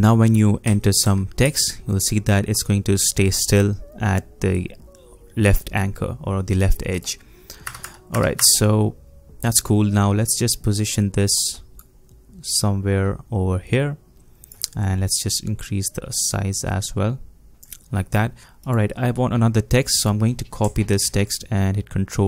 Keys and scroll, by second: 0.4-1.9 typing, 7.7 BackSpace, 7.8 BackSpace, 8.1 BackSpace, 21.0 ctrl+c.